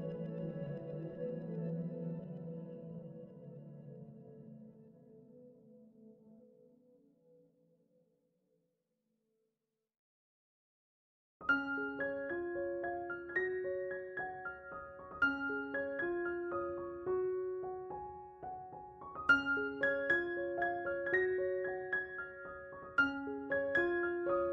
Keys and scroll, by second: 1.6 2, 2.0 s, 3.6 s, 5.1 4, 17.8 s.